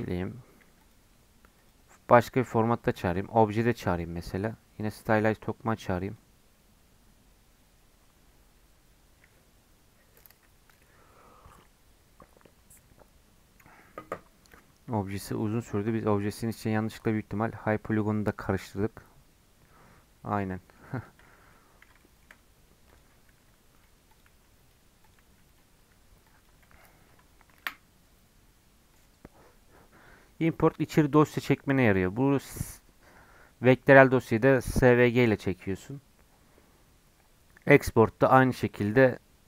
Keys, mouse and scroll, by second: 0.8-17.1 drag, 17.1-20.0 scroll down 4, 20.0-20.4 scroll down 4, 20.5 middle click, 21.0 click, 21.2-21.5 scroll up 3, 21.5-22.9 middle drag, 22.9 click, 23.3 g, 24.1 click, 24.3 g, 25.0 click, 25.2 g, 25.8-26.2 scroll down 5, 26.2-27.6 drag, 27.6 Delete, 28.9-39.4 drag.